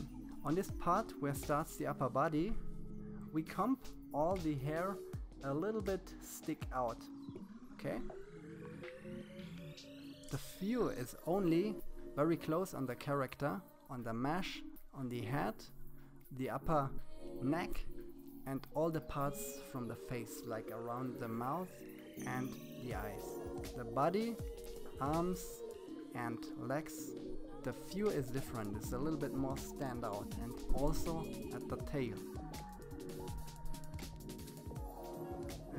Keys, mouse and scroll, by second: 5.0-7.5 drag, 13.7 KP_1, 18.3-20.6 drag, 32.7 KP_1, 33.1 click.